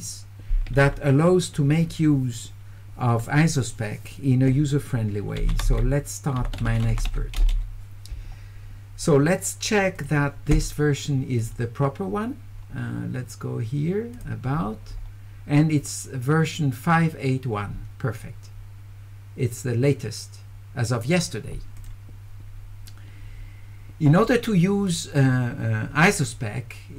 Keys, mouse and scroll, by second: 6.4 e, 6.9 w, 10.0 click, 11.4 click, 14.2 click, 21.8 click, 24.9-26.1 drag.